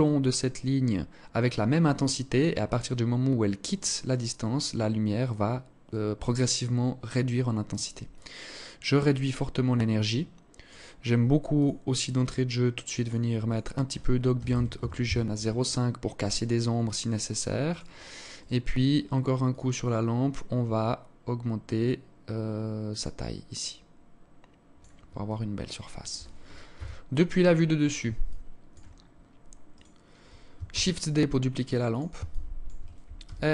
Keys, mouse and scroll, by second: 7.6 click, 11.1 click, 17.2 right click, 17.9 right click, 19.0 click, 20.1-20.5 scroll down 2, 22.5 click, 24.7 alt+click, 26.3 KP_7, 27.7 alt+shift+click, 28.5-29.3 scroll down 2, 29.3 right click, 30.2 shift+d, 31.8 alt+shift+click, 32.7 r.